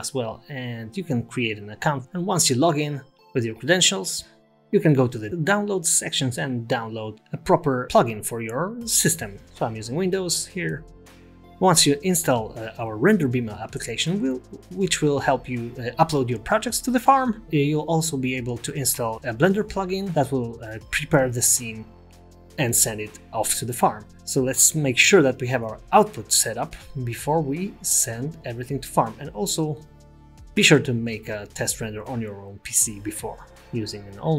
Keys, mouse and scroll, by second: 24.6 click, 30.3 click, 33.3 click.